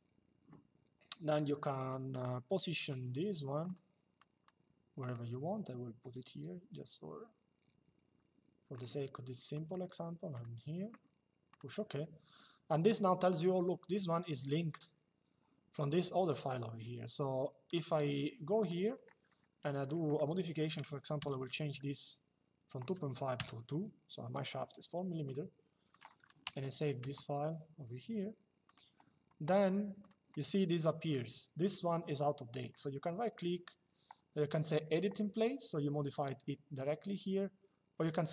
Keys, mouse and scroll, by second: 1.6 click, 9.2 click, 11.2 click, 13.0 click, 17.4 click, 19.5 click, 23.1 KP_2, 24.9 click, 26.7 Return, 28.4 click, 29.7 click, 32.3 right click.